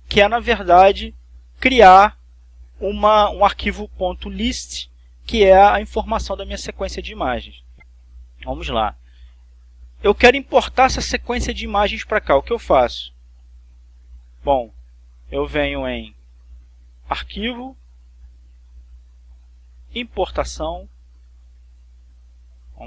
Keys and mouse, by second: 1.5 click, 2.6 click, 7.7 click, 8.3 click, 14.2 click, 15.2 click, 17.0 click, 20.4 click.